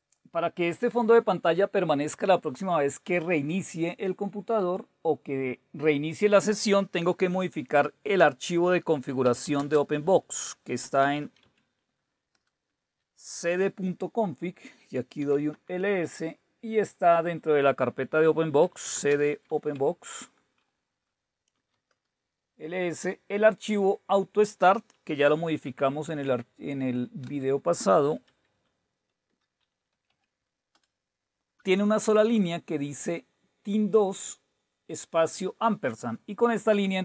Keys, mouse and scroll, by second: 0.0 click, 4.6 click, 6.0-7.7 drag, 9.0-13.4 typing, 15.0-15.7 typing, 18.4-19.9 typing, 20.2 Return, 21.3-22.0 typing, 25.3-29.9 typing, 30.1 Tab, 30.7 Return, 33.4 Right, 33.7 Right, 33.9 Right.